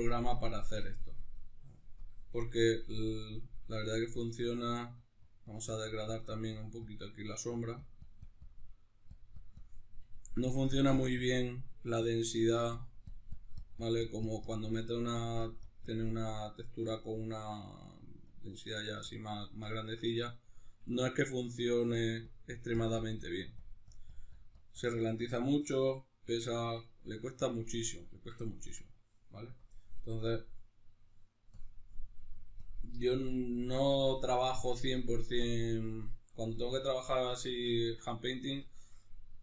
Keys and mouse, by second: 0.6-2.0 middle drag, 2.0 click, 2.4 middle click, 3.0-7.2 drag, 7.2 middle click, 7.5-8.6 drag, 8.6 middle click, 9.1 click, 9.8 middle click, 10.4-14.7 drag, 14.7 middle click, 15.2-16.4 drag, 16.4 middle click, 16.9-19.4 drag, 19.4-22.0 middle drag, 22.0-25.6 drag, 25.6-29.6 middle drag, 29.6-38.0 drag, 38.0-39.4 middle drag.